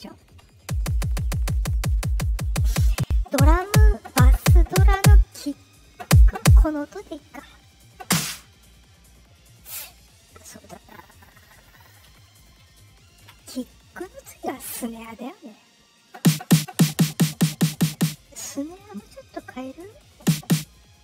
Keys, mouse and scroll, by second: 7.6 click, 18.6 click.